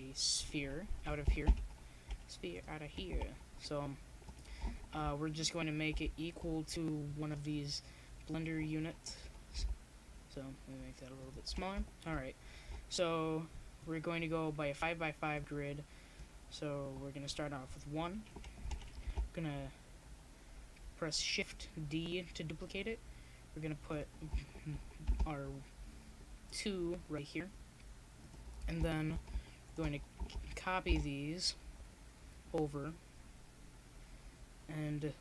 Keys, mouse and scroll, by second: 1.7 KP_0, 2.8 KP_1, 4.1 KP_5, 7.3-9.2 drag, 9.2 middle click, 10.5-11.7 drag, 11.7 g, 12.2 middle click, 13.4 s, 16.2 g, 20.3 s, 22.3-26.5 drag, 27.1-29.1 drag, 29.1 middle click, 30.0 shift+d.